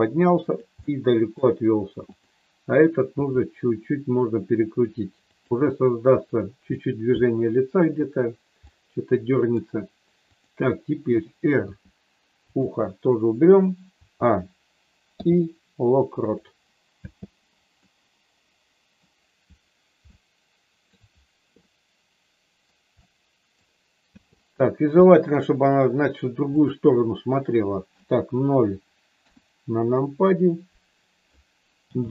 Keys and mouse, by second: 0.8 middle click, 3.0 r, 5.3 click, 6.7 middle click, 8.6 middle click, 11.8 r, 13.9 a, 15.0 i, 16.9 space, 17.8-19.0 middle drag, 20.0 shift+middle click, 21.5-22.6 middle drag, 23.0 middle click, 24.2 space, 25.0 middle click, 29.1 KP_0, 31.8 g.